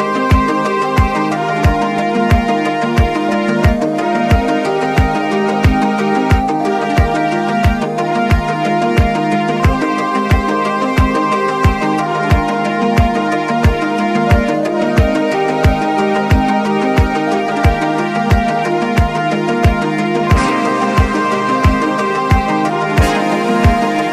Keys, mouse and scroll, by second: 0.7 click, 3.2 typing, 3.8-5.3 drag, 6.4 click, 7.6 click, 9.9 click, 11.4 click, 13.0 click, 14.8 click, 14.9-15.4 alt+scroll down 3, 15.9 alt+scroll down 1, 16.4 ctrl+scroll up 1, 16.9 click, 18.1-20.6 drag, 21.3 alt+scroll down 1, 22.5 scroll up 1, 22.7-23.2 scroll down 1, 23.2 click, 24.0-24.1 alt+scroll up 2.